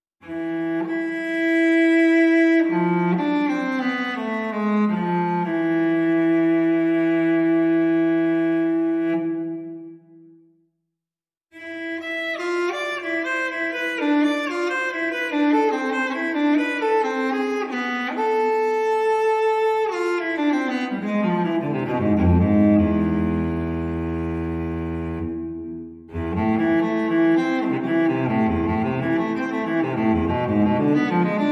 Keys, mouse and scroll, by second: 0.5-5.1 drag, 8.1 click, 9.4 click, 10.3-10.8 scroll down 2, 10.8-11.2 scroll up 2, 11.2-11.8 scroll down 2, 11.8 scroll up 2, 12.0 scroll down 2, 12.1 scroll up 2, 13.1 click, 14.3 click, 16.1 click, 16.6 1, 17.4 click, 21.4 click, 21.9 click, 24.0 0, 25.1 click, 25.8 click, 26.8 scroll down 2, 27.3-28.3 scroll up 2, 28.3-29.5 scroll down 2, 29.5-30.4 scroll down 1.